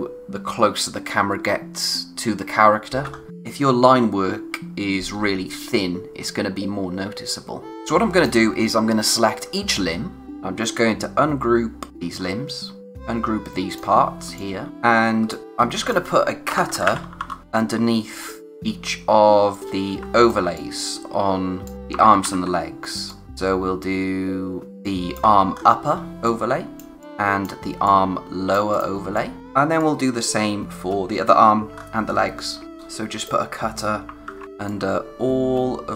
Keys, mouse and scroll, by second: 3.1-3.7 scroll up 1, 7.7-8.2 scroll down 1, 8.2 click, 9.4 space, 9.7 click, 9.9 space, 11.9 click, 12.9 space, 14.3 click, 14.7 scroll up 1, 15.2 space, 15.3 click, 15.4 scroll down 1, 15.8 click, 16.5-17.7 typing, 17.4-18.1 scroll down 1, 18.1 click, 18.8-19.5 scroll up 1, 19.5 click, 20.5 click, 22.0 ctrl+c, 22.2 ctrl+v, 23.1 click, 23.2 space, 24.8 click, 25.2 space, 25.5-26.1 scroll down 1, 26.1 click, 29.0 space, 29.1 click, 29.4 v, 29.8 click, 30.4-30.9 scroll down 1, 30.9 space, 31.7-32.5 scroll up 1, 32.6 click, 33.7-34.0 scroll down 1, 34.7 click, 35.2-35.6 scroll down 1, 35.6 space.